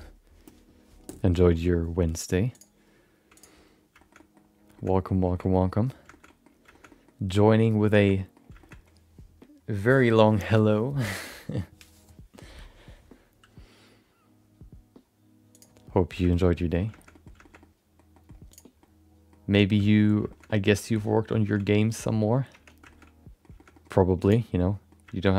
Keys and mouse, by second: 2.5-3.7 drag, 4.0 shift+middle click, 4.1 middle click, 4.7 shift+middle click, 5.3 shift+middle click, 5.5 middle click, 6.1 shift+middle click, 6.7 shift+middle click, 6.9 middle click, 7.3 middle click, 8.0 shift+middle click, 8.6 shift+middle click, 16.3 shift+middle click, 16.4 middle click, 16.9 shift+middle click, 17.1 middle click, 17.4 shift+middle click, 17.6 middle click, 18.1 middle click, 18.8 middle click, 19.7 shift+middle click, 20.3 shift+middle click, 20.4 middle click, 20.9 middle click, 21.4 shift+middle click, 21.5 middle click, 21.9 click, 22.5 Tab, 22.8 middle click, 23.0 middle click, 23.5 shift+middle click, 23.7 middle click, 24.2 click, 24.5 middle click.